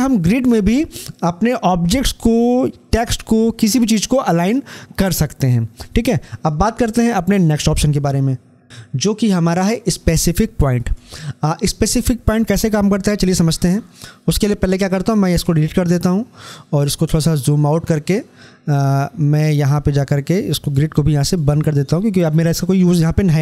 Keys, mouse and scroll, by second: 10.6 click, 16.8 scroll down 1.